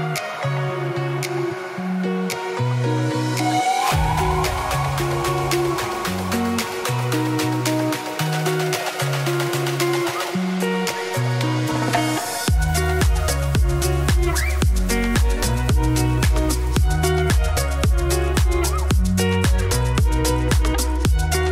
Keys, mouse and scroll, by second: 1.1 middle click, 1.7 Tab, 1.9 scroll down 2, 2.0 ctrl+s, 2.8 click, 3.3 click, 3.5 z, 3.8 Tab, 3.9 2, 4.0 click, 4.7 shift+d, 5.4 p, 5.8 Tab, 6.3 click, 6.7 Tab, 6.8 a, 7.1 middle click, 7.9-10.4 typing, 10.9-12.1 middle drag, 12.8 middle click, 12.9 ctrl+z, 13.1 middle click, 13.9 s, 14.7 2, 14.9 ctrl+r, 15.8 ctrl+r, 17.0 2, 17.0 shift+click, 17.6 KP_7, 18.0 g, 19.0 middle click, 19.5 2, 19.6 alt+click, 19.9 g, 21.2-21.5 typing.